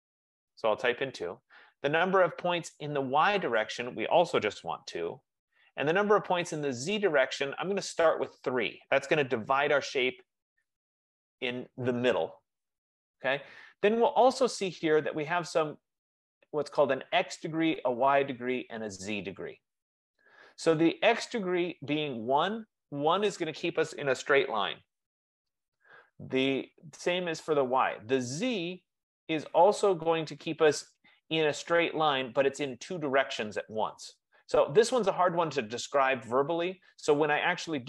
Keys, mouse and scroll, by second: 0.0 2, 1.1 Return, 3.8 click, 4.8 2, 8.4 click, 9.6 Return, 12.5-13.5 drag.